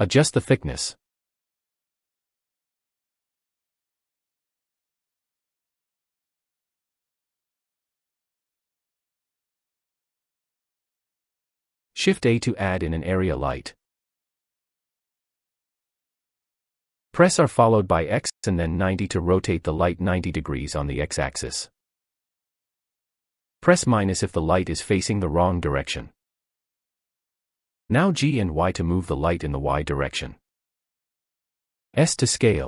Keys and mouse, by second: 1.1 click, 1.6-6.5 drag, 4.1 0, 9.2-9.5 drag, 10.6-11.4 shift+drag, 13.2 shift+a, 18.5 r, 20.7 x, 22.2 9, 22.4 0, 24.4 -, 25.7 click, 27.3 g, 27.6 y, 30.4 click.